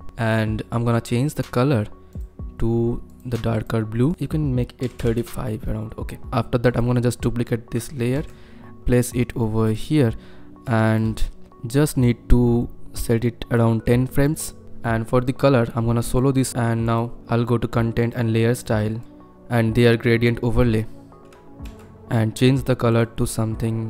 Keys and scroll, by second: 4.9 KP_3, 5.1 Return, 8.2 ctrl+d, 11.4 =, 21.6 ctrl+F1.